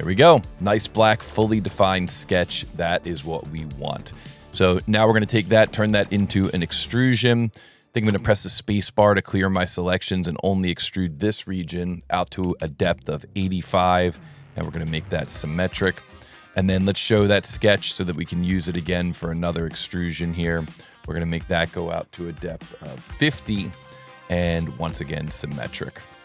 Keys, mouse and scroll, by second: 0.0 middle click, 0.2 middle click, 0.9 click, 1.2 scroll up 1, 1.8 ctrl+middle click, 4.5 s, 5.5 click, 7.0 middle click, 8.1 space, 9.3 click, 9.9 click, 10.9 click, 13.8 Tab, 14.7 space, 17.7 click, 18.5 s, 19.3 click, 21.4 click, 23.2 Tab, 23.5 Tab, 24.5 Tab, 24.8 space.